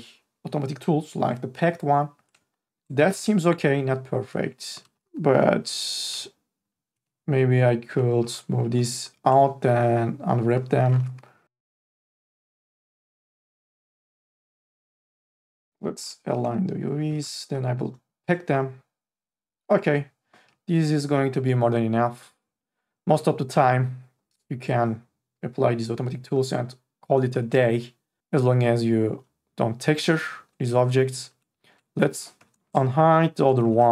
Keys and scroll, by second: 5.3 u, 5.7 l, 8.2 e, 10.9 r, 12.3 e, 13.8 2, 16.0 3, 16.4 e, 17.5 ctrl+a, 32.4 3.